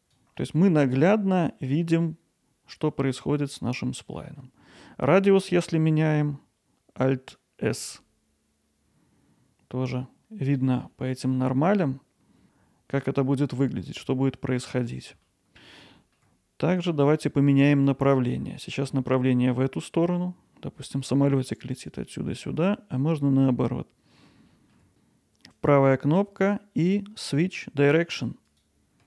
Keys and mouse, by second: 0.4 alt+middle click, 0.9 alt+middle click, 3.7 middle click, 4.4 alt+middle click, 7.8 alt+s, 10.9 alt+middle click, 11.7-13.8 alt+middle drag, 14.8 alt+middle click, 15.3 ctrl+alt+middle click, 16.0 alt+middle click, 18.5 middle click, 24.5 alt+middle click, 25.7-28.6 right drag.